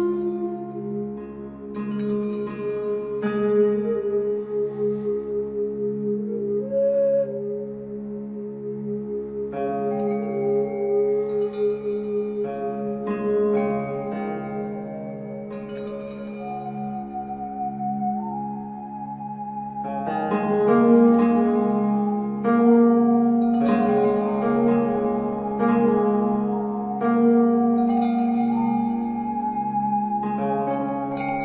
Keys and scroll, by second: 27.0 ctrl+a.